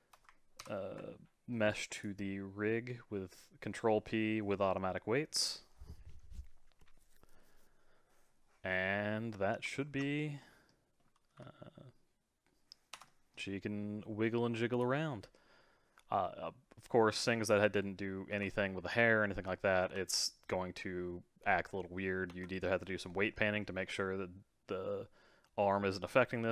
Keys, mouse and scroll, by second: 0.6 ctrl+p, 8.6 scroll down 2, 8.9 middle click, 9.8 ctrl+Tab, 10.4-11.3 middle drag, 11.3 g, 13.1-14.7 middle drag, 14.7 click, 15.1 g, 19.8 g.